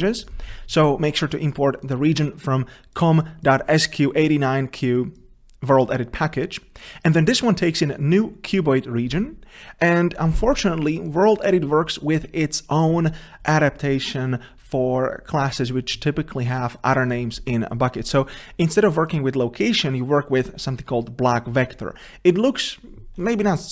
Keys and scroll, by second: 0.3 ctrl+space, 11.2 ctrl+b, 23.6 ctrl+b.